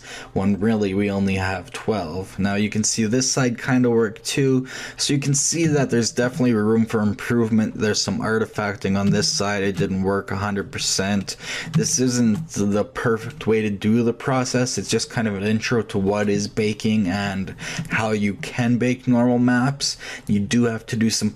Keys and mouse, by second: 0.7-2.5 middle drag, 7.1 shift+middle click, 7.6-8.6 shift+middle drag.